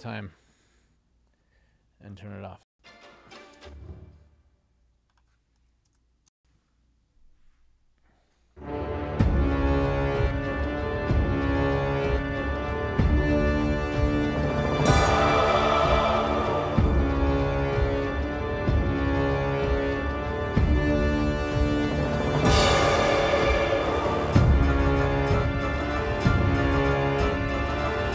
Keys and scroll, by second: 2.8 space, 6.4 space.